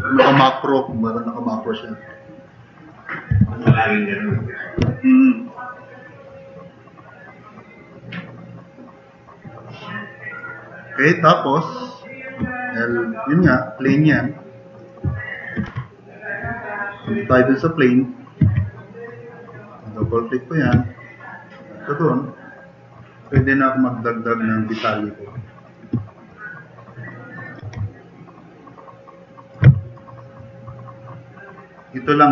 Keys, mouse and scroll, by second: 3.3 4, 4.1 click, 4.6-5.1 drag, 5.5-5.9 drag, 7.1 drag, 8.1-8.4 drag, 9.5-9.9 drag, 10.0-10.4 drag, 10.5-11.0 drag, 11.1 click, 15.7 2, 18.4 2, 21.4 click, 22.1 click, 22.8 click, 23.4 drag, 26.8 click, 27.3 click, 30.0-31.5 drag.